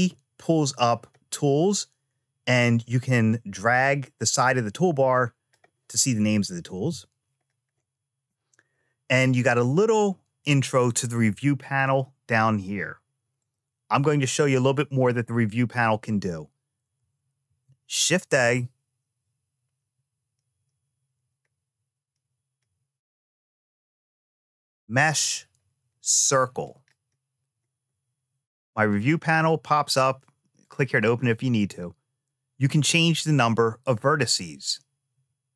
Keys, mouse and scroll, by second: 2.2-3.5 drag, 3.9-5.3 drag, 6.5 t, 13.1 click, 17.2 shift+a, 28.6 click, 30.4 click, 32.6-35.5 drag.